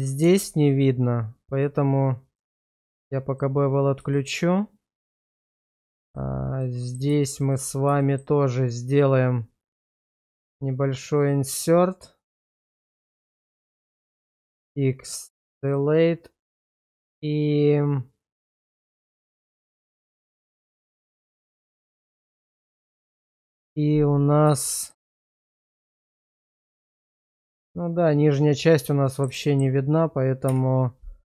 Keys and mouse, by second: 0.2 Tab, 3.3 click, 4.1 shift+middle click, 5.7 shift+click, 6.6 middle click, 7.3 shift+click, 8.0 shift+middle click, 10.0 i, 13.6 click, 14.3 x, 15.7-22.7 middle drag, 23.4 /, 24.7 shift+middle click, 25.2 middle click, 25.9 shift+middle click, 26.8 shift+middle click, 27.3-29.2 middle drag, 29.4 shift+middle click, 30.5 /.